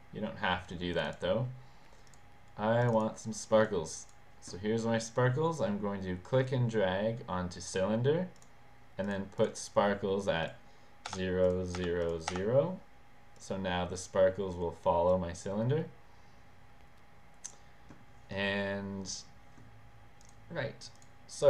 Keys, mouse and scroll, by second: 1.0 click, 2.1 click, 2.8 click, 3.7-4.2 drag, 6.5-7.8 drag, 8.4 click, 9.1 click, 9.4 click, 10.5 click, 11.2 0, 11.5 click, 11.9 0, 12.1 click, 12.4 0, 13.5 click, 15.1-17.6 drag, 20.3 click, 21.0 click.